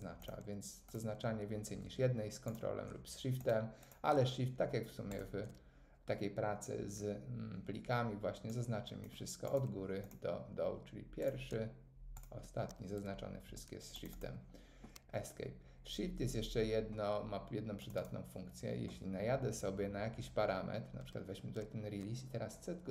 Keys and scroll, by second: 13.3 Escape.